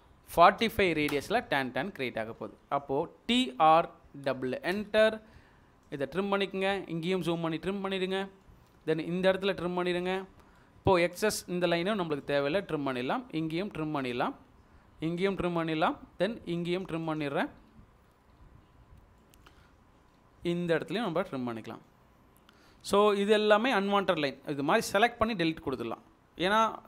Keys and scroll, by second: 0.4 typing, 3.1-4.8 typing, 22.7 Escape, 25.6 Delete.